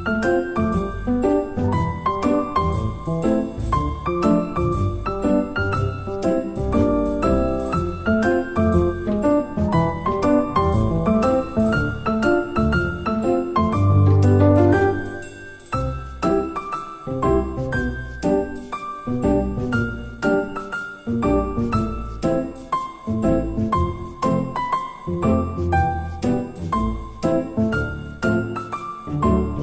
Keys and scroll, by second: 0.1 Delete, 0.8 Delete, 1.5 8, 1.8 F2, 7.2 Delete, 23.0 8, 23.3 F2, 26.2 Tab.